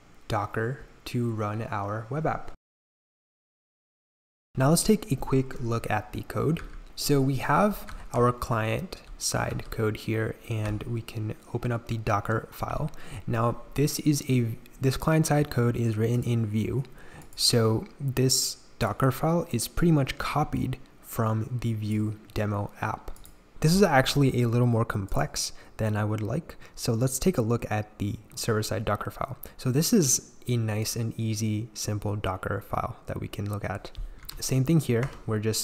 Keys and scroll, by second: 6.6-10.6 typing, 23.5 k, 34.2 shift+v, 35.0 Escape.